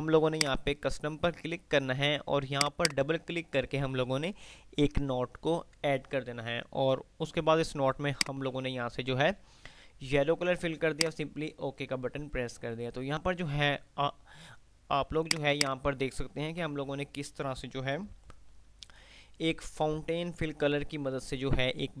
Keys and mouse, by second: 2.5 click, 8.3 click, 11.3 click, 15.5 click, 16.8 p.